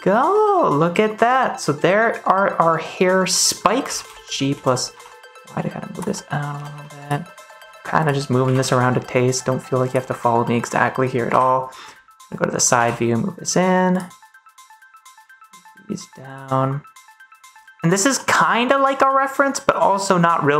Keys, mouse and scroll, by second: 3.7 g, 3.9 z, 4.4 x, 4.8 y, 5.8 click, 6.0 middle click, 6.4 g, 6.6 y, 6.9 click, 7.2 middle click, 7.2 click, 7.5 ctrl+s, 7.9 click, 8.3 g, 8.6 z, 9.8 click, 10.4 middle click, 11.2 KP_3, 12.7 g, 13.8 click, 15.1 g, 17.2 click, 17.4 g, 17.8 click, 18.1 middle click, 19.7 middle click.